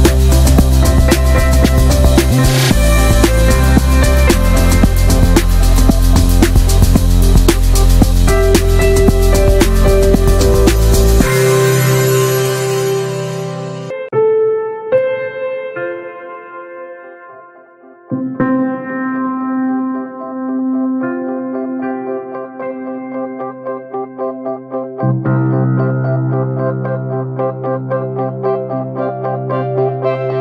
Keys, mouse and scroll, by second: 0.0-1.4 scroll up 6, 0.2 middle click, 0.7 shift+middle click, 1.4 alt+shift+click, 1.7 scroll down 1, 2.0-3.4 shift+middle drag, 3.4 scroll up 2, 3.6-5.1 shift+middle drag, 5.1 alt+shift+click, 5.2 scroll down 1, 5.4 middle click, 5.7 scroll up 1, 6.1 alt+shift+click, 6.3 scroll down 3, 6.5 shift+middle click, 6.6-7.3 shift+scroll up 3, 6.9 shift+middle click, 7.6 scroll down 2, 7.8 shift+middle click, 8.0 right click, 8.1 a, 8.5 a, 8.6 right click, 8.9 scroll down 3, 9.1 middle click, 9.9 click, 10.3 Tab, 10.5 middle click, 10.7 ctrl+s, 11.0 click, 11.4 Tab, 11.6 a, 12.2 s, 12.8 scroll down 1, 12.9 s, 13.6 s, 14.0 Tab, 14.1 drag, 14.4 middle click, 14.5-14.9 ctrl+scroll up 2, 14.6 ctrl+s, 14.9 shift+middle click, 15.3 ctrl+s, 15.6 click, 15.8 shift+middle click, 15.8-16.5 scroll up 1, 16.5 click, 17.2 click, 17.4 Tab, 18.0 a, 19.4 s, 19.5 Tab, 19.7 scroll down 2, 19.9-20.9 middle drag, 20.9-21.3 shift+scroll up 1, 21.3 click, 21.4 Tab, 22.1 middle click, 22.7 s, 24.3 Tab, 24.4 drag, 24.6 scroll down 2, 24.8-25.2 middle drag, 25.2 ctrl+s, 25.3 scroll down 1, 25.4 shift+middle drag, 25.7 click, 26.0 ctrl+a, 26.4-26.8 middle drag, 26.8 ctrl+j, 27.1 ctrl+a, 27.2 click, 27.4 middle drag, 27.7 ctrl+s, 27.9 shift+middle drag, 28.0 scroll up 1, 28.1-29.2 middle drag, 29.2 Tab, 29.4 middle click, 29.8 a, 30.1 a, 30.3-30.4 right drag.